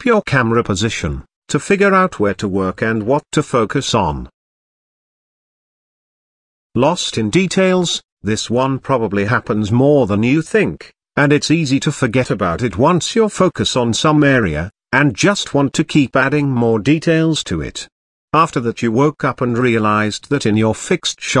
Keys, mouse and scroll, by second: 0.2 g, 1.0 click, 1.5 click, 13.6-18.6 middle drag, 18.7 middle click, 19.5-19.9 middle drag, 20.9 shift+click.